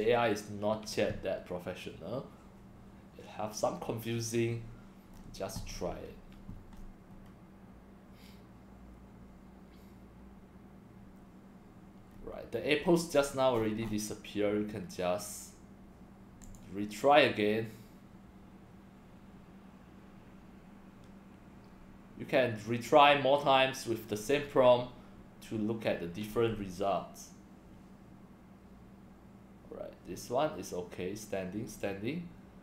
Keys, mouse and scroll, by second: 4.4 scroll down 3, 5.1 scroll down 2, 5.7 scroll up 3, 6.7 scroll down 2, 7.1 scroll up 1, 12.1 scroll down 3, 12.8-13.2 scroll down 3, 13.5-13.9 scroll up 9, 16.4 click, 31.8-32.6 drag.